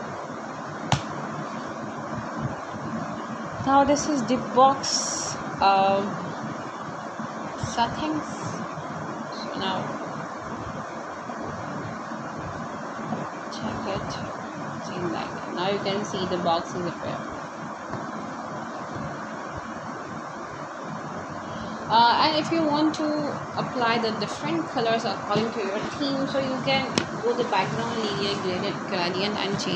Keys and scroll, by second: 18.6-21.0 typing, 22.3 shift+;, 22.9 b, 23.1 e, 23.8 Return, 25.2 shift+[, 25.7 Return, 27.2 Up.